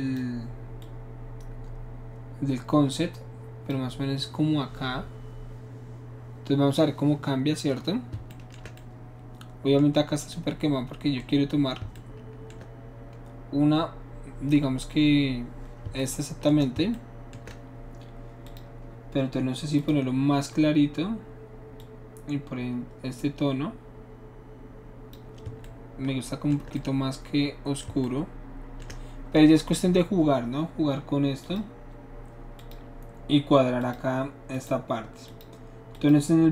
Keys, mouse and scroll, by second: 0.8-3.7 drag, 8.4-11.2 shift+middle drag, 18.4 shift+click, 19.8 click, 21.8-25.1 drag, 31.4 click, 32.6 click, 33.8 click, 34.5 click, 35.3 click, 35.9 click.